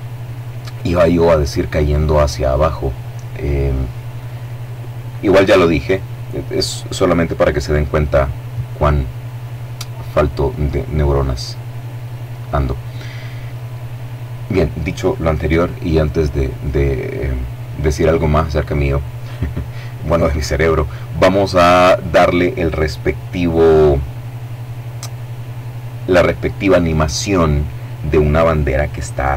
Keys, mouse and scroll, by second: 15.7-16.5 scroll down 2.